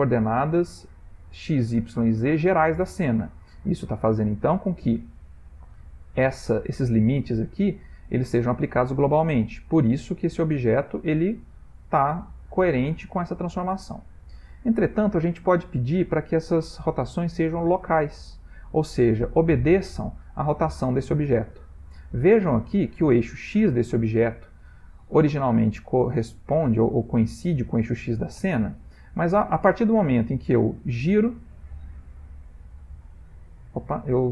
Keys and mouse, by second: 8.5 r, 16.2 click, 19.5 ctrl+middle click, 21.5 ctrl+middle click, 24.6 middle click, 24.7 middle click, 29.4 r, 32.2 r.